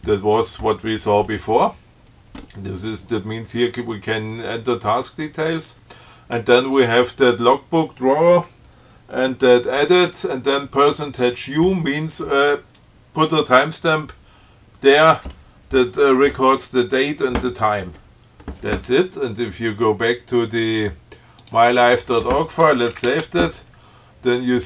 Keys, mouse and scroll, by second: 20.0 click, 21.6 click, 23.1 ctrl+x, 23.3 ctrl+s.